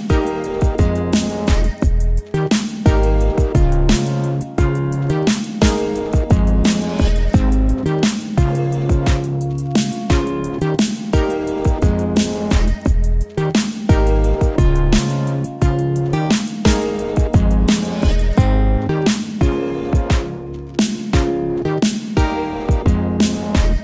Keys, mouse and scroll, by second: 7.8 v, 8.9 ctrl+t, 11.0-13.5 drag, 13.5-17.1 alt+drag, 15.6-16.9 drag, 18.6-20.2 alt+drag, 21.0 ctrl+t, 23.0-23.8 alt+drag.